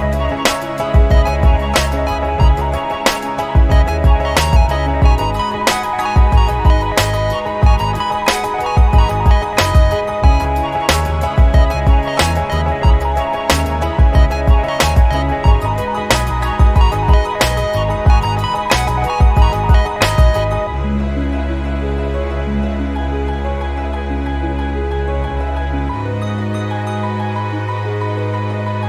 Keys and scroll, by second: 9.9 ctrl+t.